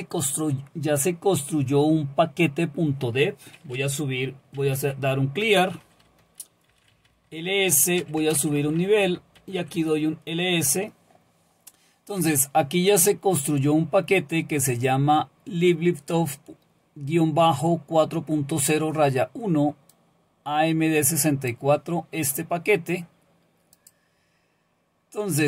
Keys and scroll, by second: 4.3-9.9 typing, 9.0 Return.